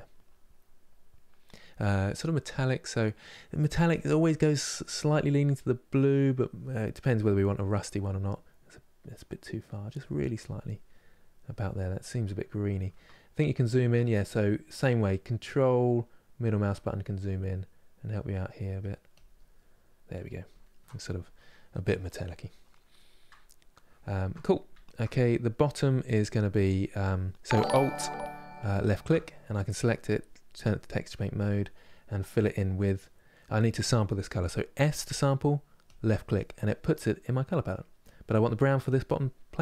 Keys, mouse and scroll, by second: 4.7-7.1 drag, 7.1-8.7 middle drag, 8.7-10.6 drag, 10.6-17.2 middle drag, 17.2-18.9 drag, 19.3-28.6 middle drag, 28.6 alt+click, 30.3 click, 30.9-38.6 middle drag, 38.6 click, 39.1-39.6 middle drag.